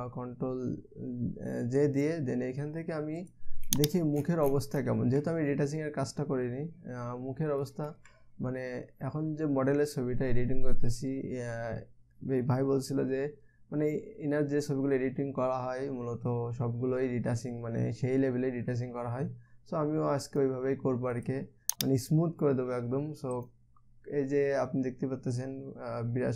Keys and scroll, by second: 0.0 ctrl+j.